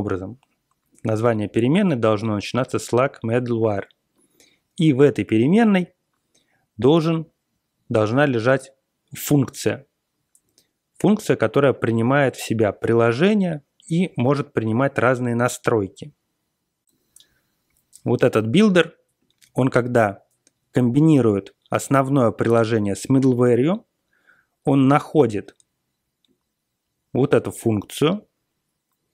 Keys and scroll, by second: 16.8 ctrl+l.